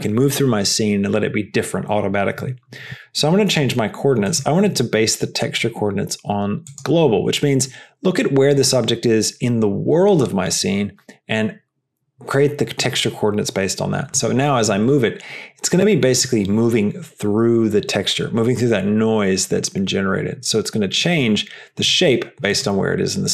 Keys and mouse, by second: 4.9-7.0 drag, 14.8 g.